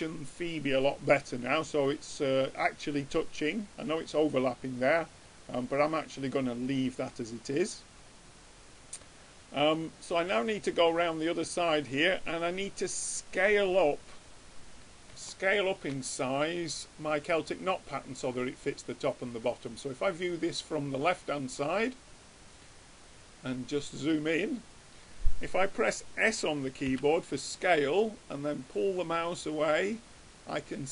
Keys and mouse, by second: 3.5-7.1 middle drag, 13.1 click, 15.3-17.3 middle drag, 19.5-21.3 drag, 22.9-25.0 middle drag, 28.2 s.